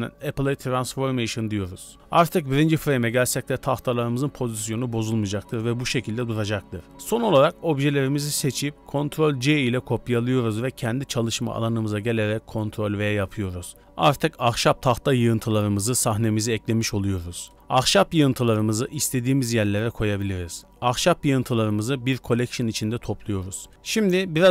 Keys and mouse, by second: 10.0 ctrl+v, 12.6 g, 13.9 s, 15.0 s, 16.1-17.4 typing, 19.1 r, 20.5 w, 21.1 m.